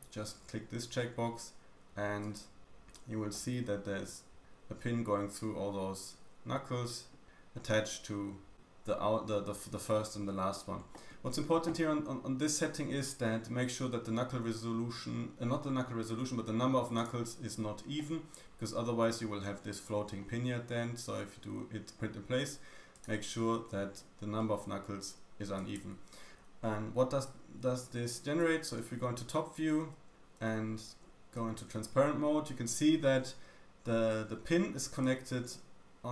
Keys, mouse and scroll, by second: 1.0-16.9 middle drag, 2.4-2.7 y, 7.3-7.8 scroll down 1, 12.3-14.0 scroll down 1, 14.0-15.3 scroll down 1, 16.9-24.6 drag, 17.9 middle click, 24.3 middle click, 25.8 y, 26.0 y, 27.7 `, 30.1 z, 30.7-31.0 scroll up 2, 31.0 shift+middle click, 31.5 scroll up 1, 34.4 d, 34.9 d, 35.0 click, 35.0 d.